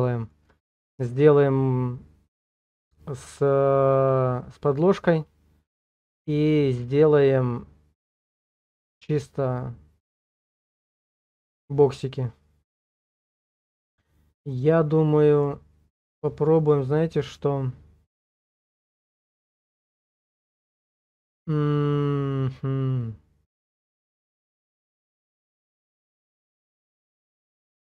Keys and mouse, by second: 0.1 shift+click, 12.0 middle click, 12.1-13.6 drag, 14.1 click, 14.3 middle click, 15.0 click, 27.0 shift+click.